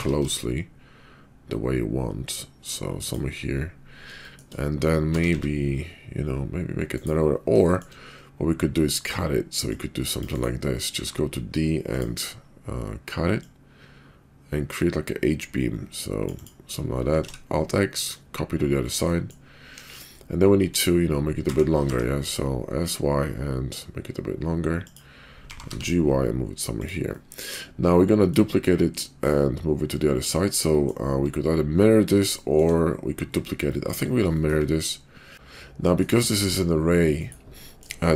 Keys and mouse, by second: 4.2 shift+middle click, 5.0 s, 7.7 shift+middle click, 9.5-10.2 drag, 10.9 d, 13.3-16.5 drag, 17.2 alt+x, 18.0 click, 19.0-19.3 drag, 19.6 KP_5, 20.4-20.7 drag, 21.4 s, 25.3 g, 27.1-27.4 middle drag, 27.5-28.3 middle drag, 28.9-30.3 middle drag, 30.7 middle click, 32.4 shift+middle drag, 33.5-33.9 middle drag, 35.2 middle click, 36.4 g, 37.7 shift+click.